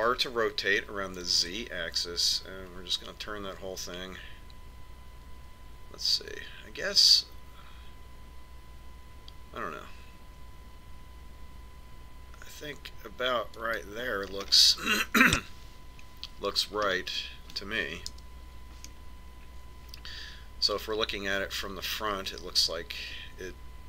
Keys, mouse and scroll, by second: 1.5 r, 16.0-20.5 middle drag, 19.8 KP_1, 20.5-22.5 middle drag.